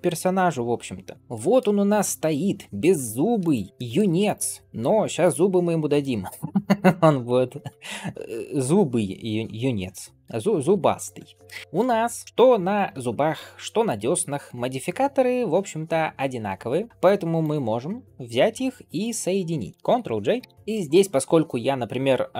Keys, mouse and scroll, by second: 0.1-0.7 scroll down 2, 1.1 scroll down 2, 1.2 shift+middle drag, 1.2 click, 1.2 scroll up 4, 2.5 g, 3.7 shift+middle drag, 4.1 click, 4.6-5.2 scroll up 2, 5.1 click, 5.7 shift+middle drag, 9.6-10.1 middle drag, 11.0 ctrl+space, 11.6-12.0 scroll up 4, 12.2 scroll down 2, 12.6-14.7 drag, 17.3-18.4 drag, 18.9 shift+click, 20.5 ctrl+j.